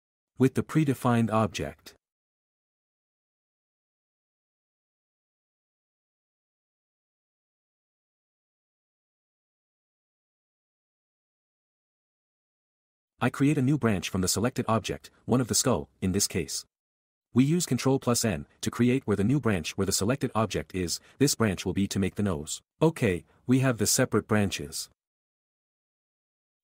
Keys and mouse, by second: 2.0 alt+a, 3.6 k, 4.1 s, 5.2 g, 7.0-14.5 typing, 7.7 Tab, 8.5 Escape, 9.3 Tab, 9.5 click, 9.6 Tab, 9.7 alt+a, 10.3 click, 15.8 ctrl+n, 16.1-23.8 typing, 16.5 ctrl+z, 22.8 Tab, 23.0 ctrl+r, 23.1 alt+a, 23.6 Tab, 23.6 alt+a, 24.9 click, 26.1 q.